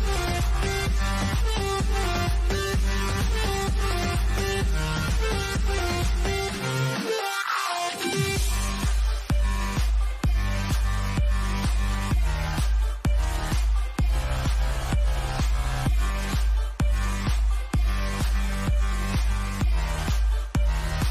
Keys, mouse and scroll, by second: 1.1 click, 1.7-4.9 middle drag, 9.3 click, 18.4 click, 20.9 click.